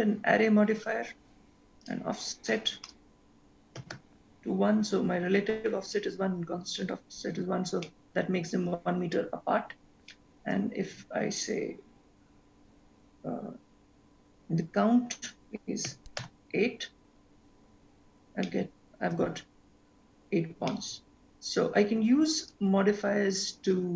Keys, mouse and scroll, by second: 1.9 click, 2.9 click, 8.0 middle click, 9.7-10.1 scroll down 2, 10.1 shift+middle click, 11.4 click, 17.4-18.4 scroll down 1, 18.4-19.7 scroll down 4, 18.7 shift+middle click, 22.6 middle click, 23.2 click.